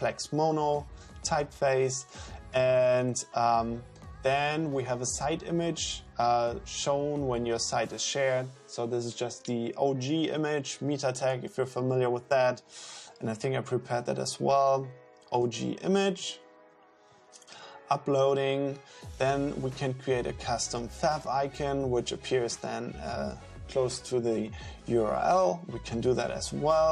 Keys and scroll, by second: 13.5 super+Up.